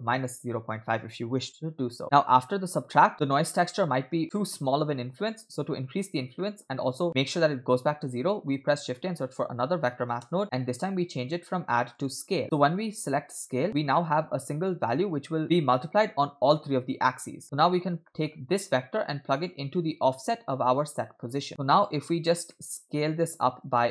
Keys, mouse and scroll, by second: 0.3-2.0 drag, 2.0 middle click, 2.5-3.4 scroll up 1, 6.4 middle click, 8.5 shift+a, 12.2 click, 13.7 click, 17.4 middle click, 17.7-18.1 scroll down 2, 18.1 middle click, 19.4-21.4 drag, 21.5 middle click, 22.5 middle click, 22.9-23.2 scroll up 2, 23.7-23.9 drag.